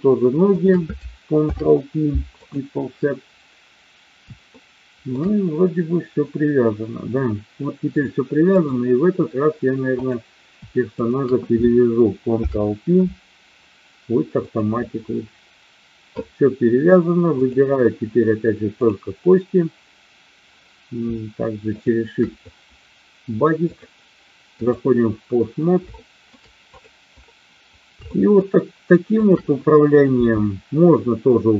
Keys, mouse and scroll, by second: 0.5 shift+click, 1.5 ctrl+p, 4.5 shift+middle click, 8.0 click, 10.0 click, 11.0 shift+click, 12.2 ctrl+p, 21.7 shift+click, 23.7-24.6 drag, 25.8-26.3 shift+middle drag, 26.6 click, 28.1 shift+middle click, 30.2 r.